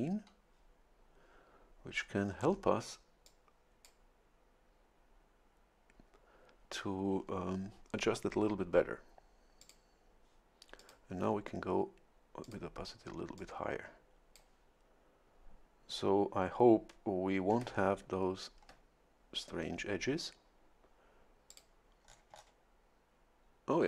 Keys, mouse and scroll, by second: 2.0-2.8 scroll up 4, 3.3 click, 9.6 click, 10.8 click, 12.4 click, 13.4-14.7 drag, 17.7-18.4 shift+scroll up 4, 21.5 click, 22.1-22.6 scroll down 1.